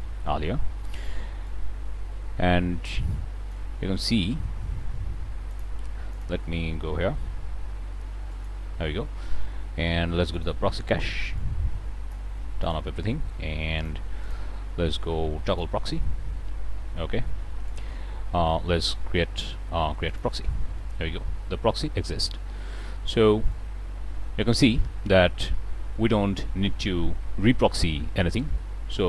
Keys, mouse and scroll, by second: 1.4-3.6 drag, 3.7-4.6 scroll down 2, 5.4 click, 6.0 shift+click, 6.9 g, 8.2 click, 10.2 click, 11.2-12.2 drag, 12.5 click, 13.7 click, 14.1 click, 15.4 click, 17.5 click, 20.0 click, 23.4-29.0 drag.